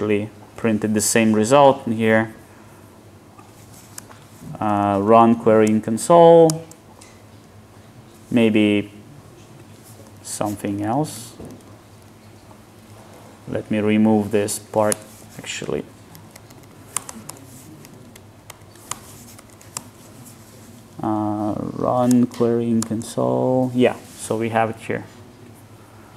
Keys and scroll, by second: 4.1 alt+Return, 12.8 alt+shift+Left, 19.8 alt+Return.